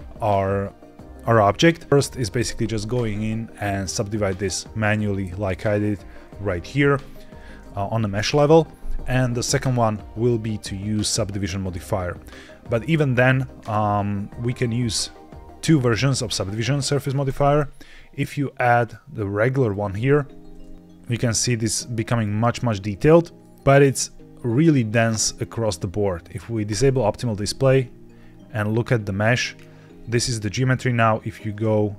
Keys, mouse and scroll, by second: 2.3 Tab, 4.7-6.0 right drag, 6.4 Escape, 7.2 Tab, 10.5 click, 17.1-20.2 drag, 21.0 middle click, 21.9 middle click, 23.3 middle click, 23.6-24.4 scroll down 3, 26.6 click, 26.6 right click, 28.1-28.5 scroll down 2, 28.9 scroll down 1, 29.8-31.0 scroll up 3, 31.4 click.